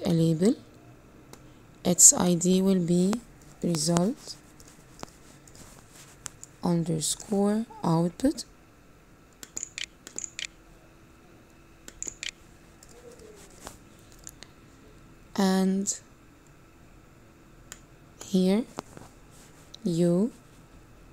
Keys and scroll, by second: 9.3 9, 9.7 o, 10.3 u, 12.2 t.